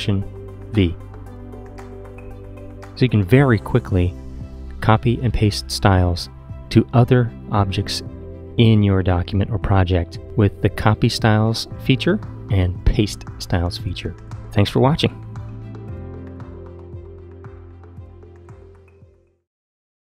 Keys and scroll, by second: 0.6 alt+super+v.